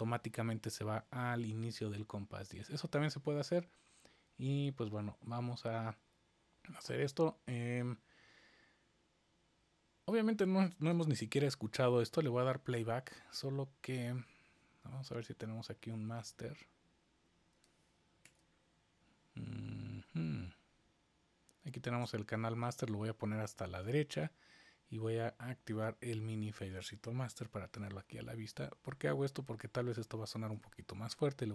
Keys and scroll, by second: 18.2 super+=, 27.1 super+=.